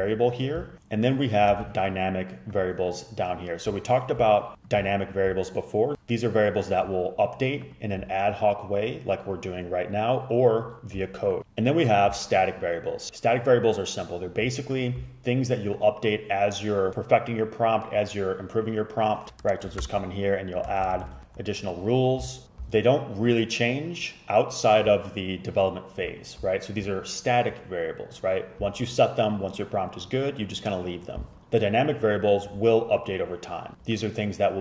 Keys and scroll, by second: 1.6 ctrl+c, 19.9-21.6 typing, 21.7 super+z.